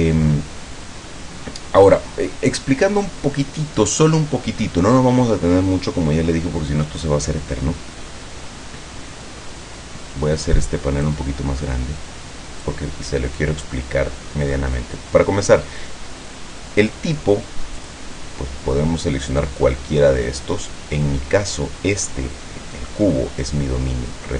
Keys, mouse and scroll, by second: 11.2-13.0 drag, 17.9 click.